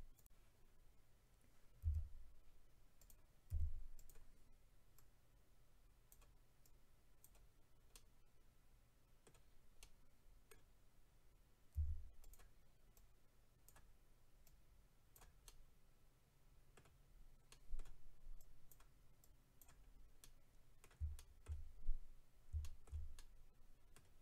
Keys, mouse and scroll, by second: 0.1 click, 3.0 click, 3.0 f, 3.1 click, 3.9 click, 4.1 click, 4.9 click, 6.6 click, 7.9 middle click, 9.8 middle click, 11.7 f, 12.2 click, 12.3 click, 12.9 click, 14.4 click, 15.4 click, 15.4 middle click, 17.0-17.5 scroll down 2, 17.5 middle click, 18.3 click, 19.2 click, 19.8-20.2 scroll down 2, 20.2 middle click, 21.8-22.1 scroll down 2, 22.6 shift+middle click, 23.9 middle click.